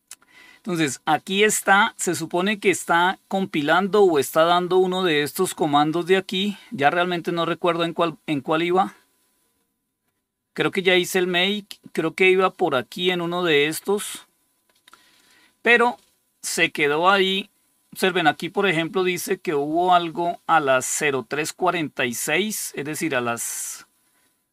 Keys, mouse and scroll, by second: 4.3 scroll down 2, 5.0-5.6 scroll down 4, 6.1 scroll down 3, 6.9 scroll down 2, 7.5 scroll down 2, 11.7 scroll down 2, 12.8-14.2 drag, 15.1 click, 19.3-20.9 drag.